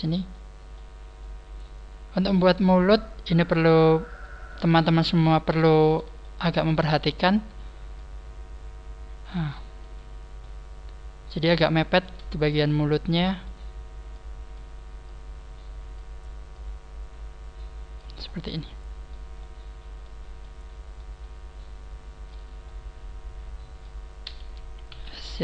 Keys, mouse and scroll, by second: 0.2 middle click, 1.4 middle click, 2.5 click, 4.0 right click, 4.4 middle click, 5.2 shift+right click, 5.2 middle click, 5.7-6.1 scroll down 4, 6.1 shift+middle click, 6.6 shift+middle click, 7.4 scroll up 1, 7.9 click, 9.8 middle click, 10.6 click, 11.0-11.5 scroll up 6, 11.8 right click, 12.2 shift+right click, 12.5 middle click, 14.0 click, 14.1 middle click, 14.1 click, 15.0 click, 16.7 click, 18.2-18.6 scroll down 4, 18.6 middle click, 19.6 middle click, 20.4 middle click, 21.3 middle click, 23.6 middle click, 24.8 s.